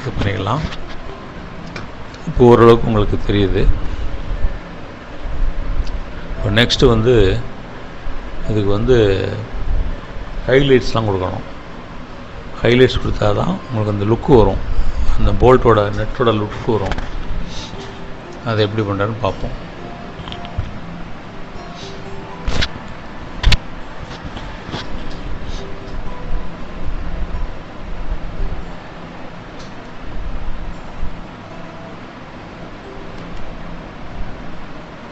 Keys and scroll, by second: 3.4 Up, 10.4 ctrl+-, 11.3 space.